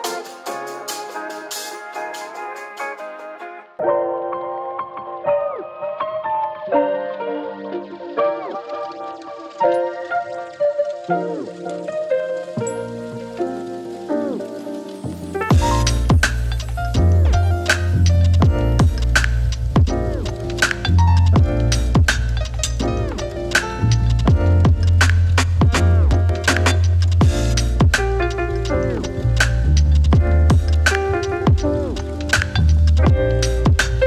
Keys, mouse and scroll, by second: 5.4 space, 7.8 ctrl+d, 9.3 click, 10.2 shift+Page_Down, 11.6 click, 14.8 Return, 15.4 Right, 15.9-17.8 typing, 18.8 click, 19.7 Return, 20.2 Right, 21.1-23.2 typing, 24.9 click, 27.2 click, 33.8 click.